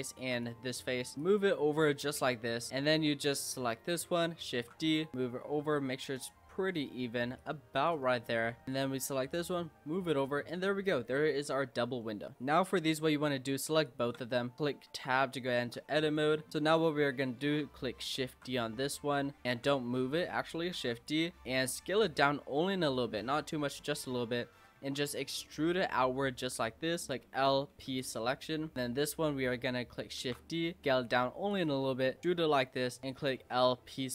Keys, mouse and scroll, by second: 0.1 shift+click, 0.4 middle click, 0.7-1.0 scroll down 4, 1.0 middle click, 1.2 click, 2.7 click, 3.7 l, 4.6 shift+d, 5.1 click, 6.9 middle click, 7.4 click, 8.0 middle click, 8.2-8.7 scroll up 4, 8.7 click, 9.3 click, 10.2 Tab, 10.5 scroll down 3, 10.7-11.3 middle drag, 11.3-12.0 scroll down 4, 12.0 middle drag, 13.8 shift+click, 14.9 Tab, 15.4 shift+middle click, 15.7-16.0 scroll down 1, 16.0 click, 18.3 shift+d, 19.5 ctrl+z, 20.8 shift+d, 21.4 s, 22.4-23.0 scroll up 4, 23.0-23.3 scroll down 2, 23.3 middle click, 23.8 scroll down 2, 24.8 e, 27.1 l, 27.7 p, 28.4 middle click, 28.7 click, 30.2 shift+d, 30.8 s, 31.7 middle click, 32.2 e, 33.0 click, 33.4 l, 33.8 p.